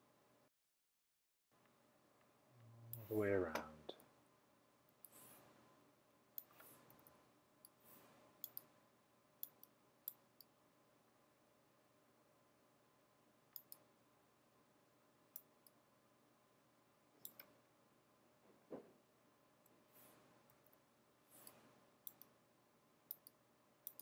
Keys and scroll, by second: 4.1-4.9 typing, 6.9-7.7 typing, 20.4-21.1 typing, 23.7-24.0 typing.